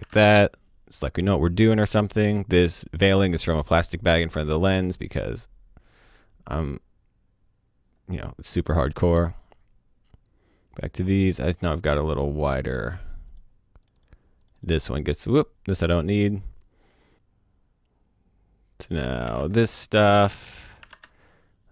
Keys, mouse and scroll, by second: 0.0 o, 0.1 space, 0.2 click, 5.6-7.6 scroll down 1, 7.6-8.3 scroll up 1, 8.3-9.1 scroll down 1, 9.1 click, 15.3 click, 19.3 space, 20.8 space, 21.0 click.